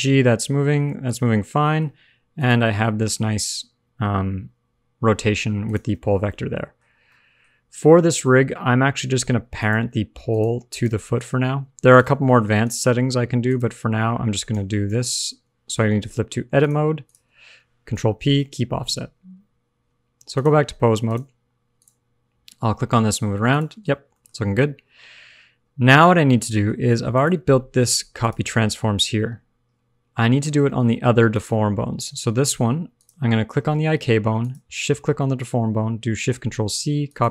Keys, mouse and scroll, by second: 1.2 alt+r, 1.3 alt+g, 1.3 alt+scroll down 3, 1.6 middle click, 2.3 click, 2.8 g, 5.9 alt+r, 6.1 alt+g, 6.2 middle click, 6.8 scroll up 1, 7.0 middle click, 9.5 shift+click, 10.2 click, 10.6 click, 11.1 g, 12.2 alt+r, 12.2 alt+g, 13.2 click, 13.4 shift+click, 14.4 ctrl+p, 17.5 click, 17.9 ctrl+p, 18.8 Tab, 20.3 click, 21.6 scroll up 1, 21.7 click, 22.3 g, 23.7 alt+r, 23.8 alt+g, 23.9-24.3 scroll down 3, 24.0 middle click, 24.3-24.6 scroll up 2, 25.8 shift+click, 26.3-26.6 scroll up 2, 26.4 middle click, 26.6 scroll down 1, 27.1 click, 28.2 click, 30.2 scroll up 3, 30.6 shift+middle click, 31.2 click, 32.9 click, 34.3 shift+click, 36.4 ctrl+shift+c.